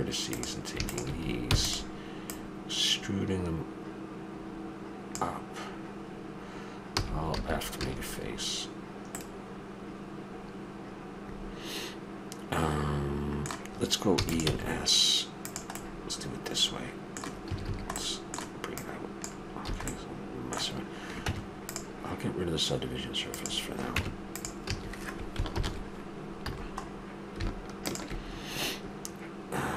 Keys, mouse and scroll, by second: 0.3-4.1 drag, 1.5 e, 6.9 f, 7.3 a, 7.8 a, 8.2-9.2 middle drag, 14.2 e, 14.4 s, 15.8 middle click, 17.5 a, 17.6 a, 18.7 middle click, 19.7 a, 21.3 Tab, 23.3-25.1 drag, 23.9 Tab, 24.7 a, 25.5 ctrl+n, 26.5 a, 26.8-27.8 middle drag, 27.8-29.1 drag.